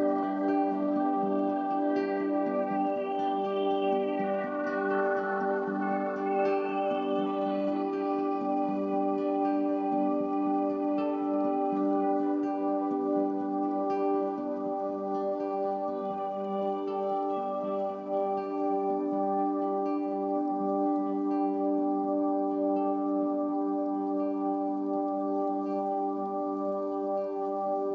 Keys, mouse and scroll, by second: 1.2 typing, 2.9 typing, 8.5 click, 10.1 shift+click, 10.6 shift+click, 11.4 shift+click, 12.4 click, 14.1 ctrl+g, 14.6 ctrl+shift+click, 15.6 ctrl+z, 16.1-18.9 drag, 19.6 ctrl+shift+g, 20.3-27.9 drag.